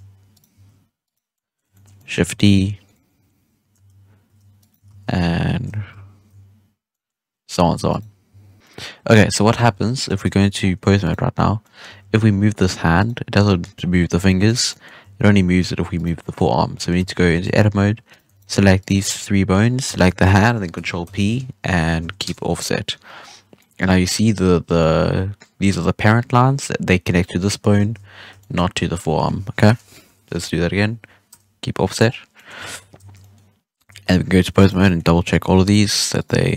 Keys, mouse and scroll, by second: 0.3 right click, 0.5 Tab, 1.0 right click, 1.3-2.2 middle drag, 2.2 shift+d, 3.0-3.8 middle drag, 3.8 shift+d, 4.8 ctrl+z, 5.8 shift+s, 6.8-7.7 middle drag, 7.7 Tab, 7.8 right click, 8.2 Tab, 8.5 1, 8.6-8.9 middle drag, 8.9 scroll down 1, 9.2-9.9 scroll up 1, 9.9 scroll up 10, 10.2 ctrl+Tab, 10.5 scroll down 1, 10.8 a, 11.0 right click, 11.5-11.9 middle drag, 11.9 r, 13.3 scroll down 1, 13.4-13.7 middle drag, 13.7 scroll up 4, 14.4 right click, 14.6-14.9 middle drag, 14.9 r, 16.1-16.5 middle drag, 16.5 scroll up 2, 16.7 middle drag, 16.9 Tab, 17.3 alt+a, 18.0 right drag, 18.3 shift+right drag, 18.7 shift+right click, 19.9 shift+right click, 21.0 ctrl+p, 23.0 scroll down 1, 23.1-23.5 scroll up 7, 23.5-26.4 middle drag, 26.4-27.7 scroll down 2, 27.7 ctrl+z, 28.2 scroll down 1, 28.3-30.0 shift+middle drag, 30.0 ctrl+p, 31.9-32.3 scroll down 1, 32.3-32.6 middle drag, 32.6 alt+a, 32.7-33.1 scroll down 1, 33.1-33.8 middle drag, 33.8 ctrl+Tab, 34.5 right click, 34.8-35.1 middle drag, 35.1 r, 36.1 right drag, 36.4 r.